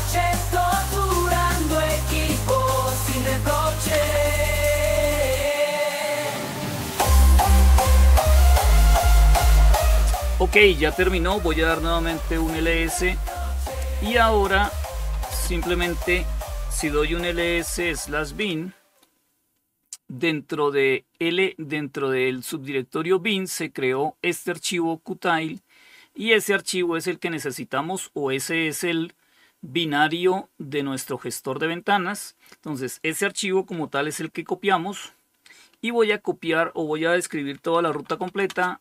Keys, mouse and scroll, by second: 10.8-11.7 typing, 14.2-14.5 typing, 16.0-17.6 typing, 23.1-24.8 drag, 36.7-38.8 typing.